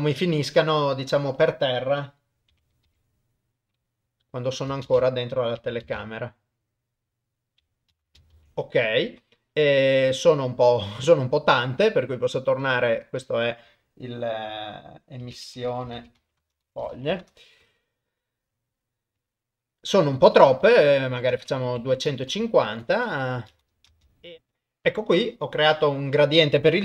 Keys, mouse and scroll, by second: 2.6 r, 4.9 shift+space, 8.5 ctrl+s, 10.6 middle click, 12.7 click, 15.9 s, 19.2 click, 22.7 shift+Left, 23.5 shift+space, 24.1 ctrl+alt+shift+F10, 24.1 shift+space.